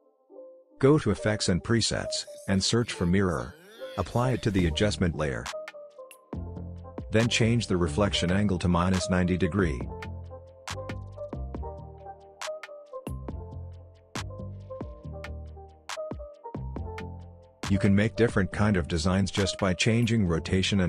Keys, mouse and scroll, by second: 0.2 click, 1.3-2.7 typing, 3.8-6.3 drag, 10.8 Return, 12.3-13.8 scroll down 1, 13.8-14.3 scroll up 1, 14.3-15.7 scroll down 1, 15.7 click, 15.7 click, 16.7 r, 17.7-20.8 drag.